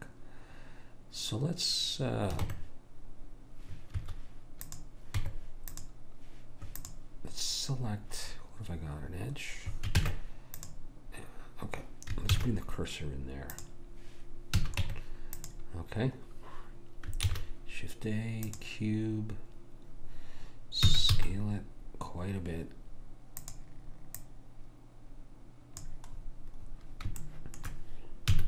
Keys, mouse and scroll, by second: 2.4 Tab, 4.7 click, 5.2 Tab, 6.8 click, 10.0 ctrl+Tab, 12.3 shift+s, 14.6 a, 14.8 Tab, 17.3 shift+a, 20.9 s, 24.2 click, 26.3-27.3 scroll up 1, 27.3-28.4 middle drag, 28.3 s.